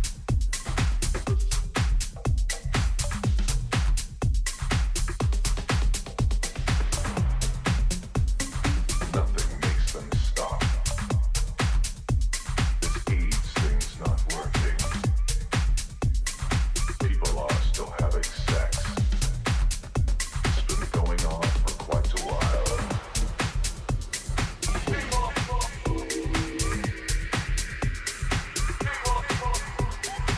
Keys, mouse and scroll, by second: 4.8 t, 7.5 a, 8.6 KP_3, 9.9-12.0 middle drag, 10.5 z, 14.6-16.4 drag, 16.1 a, 16.4 a, 16.9 a, 17.3 a, 29.9-30.3 middle drag.